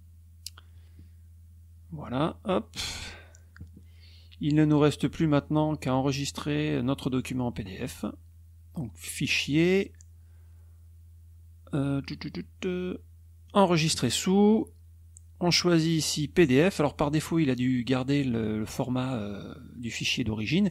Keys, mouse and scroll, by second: 9.4 click, 13.4 click, 16.5 click, 18.4 click.